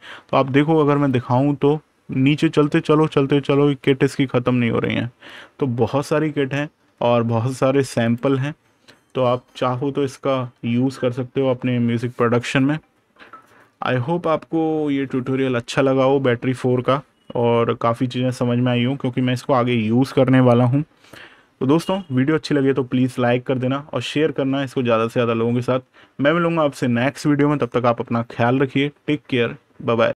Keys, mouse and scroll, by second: 0.9 click, 7.9 click.